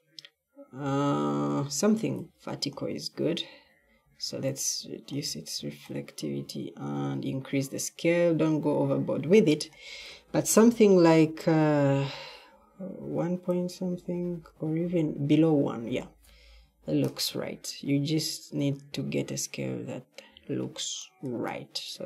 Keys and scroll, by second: 20.2 d.